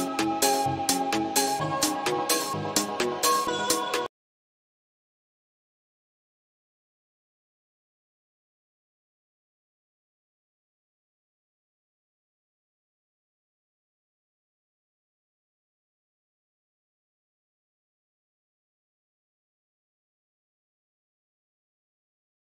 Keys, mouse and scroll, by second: 0.0-0.5 typing, 0.6 Right, 4.8 ctrl+z, 8.1 shift+Return, 9.0 shift+., 10.0 shift+,.